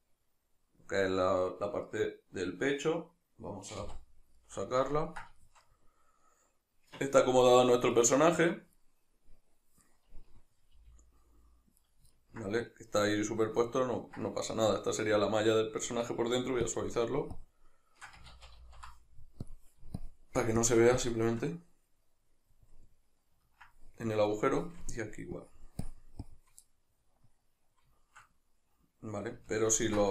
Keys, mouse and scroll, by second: 3.9 KP_Divide, 8.0 right click, 8.5 middle click, 10.8 g, 11.9 right click, 12.1 ctrl+middle click, 15.9 Tab, 16.7-21.9 shift+drag, 18.3 ctrl+z, 21.9-25.4 middle drag, 25.4-26.6 shift+drag, 26.6-30.1 middle drag.